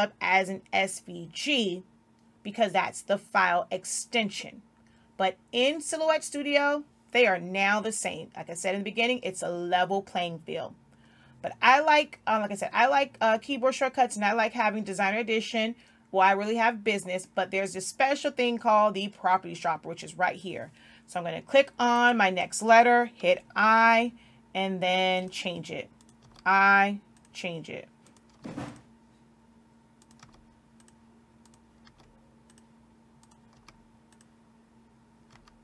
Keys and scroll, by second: 24.0 i, 26.7 i, 28.8 i, 30.7 i, 32.3 i, 34.0 i.